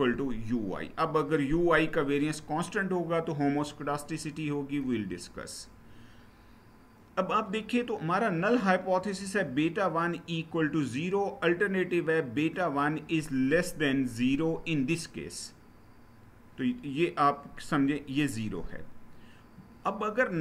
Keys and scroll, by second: 4.8 Page_Down.